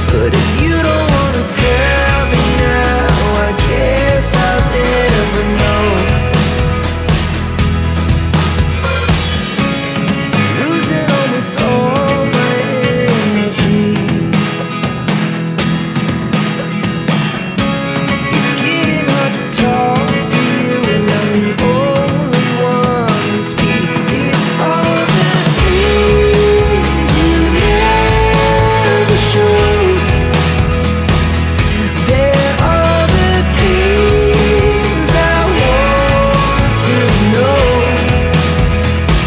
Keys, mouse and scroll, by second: 0.0 double click, 2.4 click, 8.0 click, 9.5 click, 11.1 click, 14.3 click, 15.6 ctrl+click, 16.3 ctrl+click, 17.2 right click, 20.4 click, 21.6 click, 22.7 click, 23.3 right click, 24.2 click, 25.3 click, 25.5 double click, 27.7 click, 27.9 double click, 29.8 click, 29.9 double click, 32.6 click, 32.8 double click, 37.9 click, 38.1 double click.